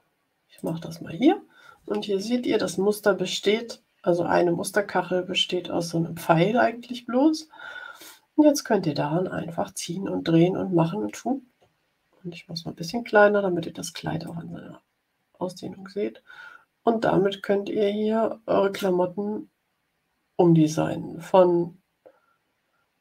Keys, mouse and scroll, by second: 0.5 click, 11.7 ctrl+scroll down 2, 14.2-23.0 drag.